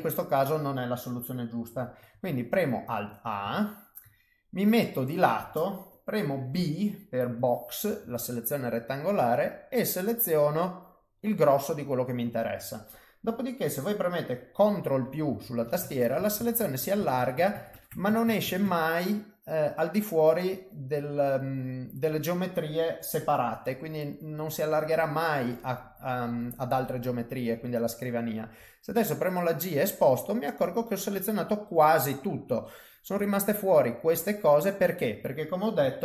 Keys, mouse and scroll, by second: 2.1 alt+a, 2.7 middle click, 3.5 shift+middle click, 4.1 middle click, 6.5 b, 11.2 middle click, 15.0 ctrl+KP_Add, 15.2 ctrl+KP_Add, 15.4 ctrl+KP_Add, 15.6-16.5 ctrl+KP_Add, 16.8 ctrl+KP_Add, 16.9 ctrl+KP_Add, 17.1 ctrl+KP_Add, 17.3 ctrl+KP_Add, 17.5 ctrl+KP_Add, 17.7 ctrl+KP_Add, 17.9 ctrl+KP_Add, 18.0 ctrl+KP_Add, 18.2 ctrl+KP_Add, 18.4 ctrl+KP_Add, 18.6 ctrl+KP_Add, 19.1 middle click, 24.0 middle click, 25.5 middle click, 33.0 middle click, 34.5 middle click.